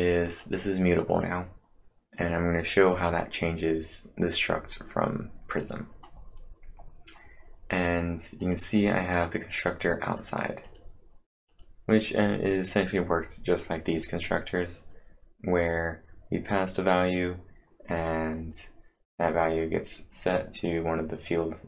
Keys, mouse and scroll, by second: 0.0-0.9 typing, 0.4 click, 1.1 click, 2.2 click, 4.4 scroll up 3, 5.6 click, 6.1-6.7 scroll down 4, 7.8 click, 8.4 click, 8.8 click, 9.3 click, 12.3 click, 12.7 click, 13.2 scroll up 3.